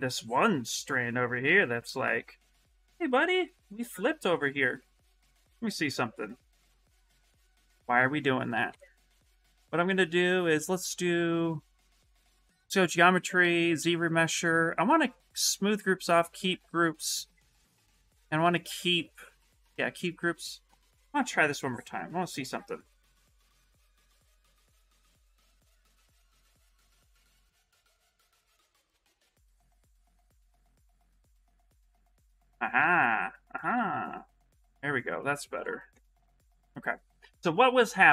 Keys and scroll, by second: 0.9 shift+f, 3.5 ctrl+z, 5.0 ctrl+z, 7.1 ctrl+z, 8.4 2, 33.4 shift+f.